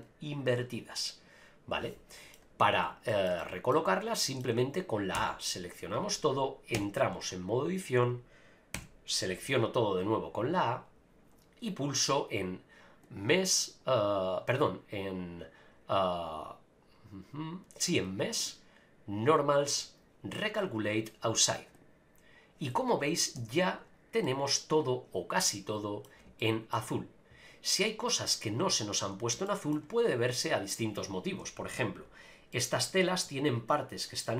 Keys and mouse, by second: 3.1 shift+middle click, 3.4 middle click, 4.2 middle click, 5.1 a, 6.8 Tab, 8.8 a, 13.0-18.2 drag, 18.4-21.9 drag, 23.4 Tab, 24.2-26.0 middle drag, 26.4-26.7 shift+middle drag, 29.4-29.7 shift+middle drag, 30.7 click, 31.6 KP_Decimal, 32.5-32.8 middle drag, 34.2-34.3 middle drag.